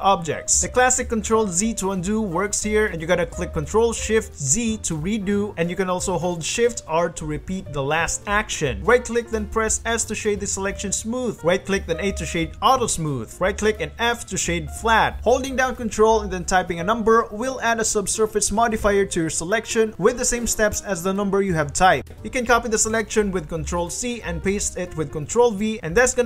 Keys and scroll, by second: 0.1 g, 1.2 ctrl+z, 1.6 g, 2.7 ctrl+z, 3.3 ctrl+shift+z, 4.4 ctrl+z, 5.7-9.2 typing, 11.9 a, 13.4 f, 14.9 ctrl+1, 15.5 ctrl+1, 16.1 ctrl+2, 16.6 ctrl+3, 17.0 ctrl+1, 17.4 ctrl+2, 19.3 1, 19.5 2, 19.7 3, 23.5 ctrl+c, 24.9 ctrl+v.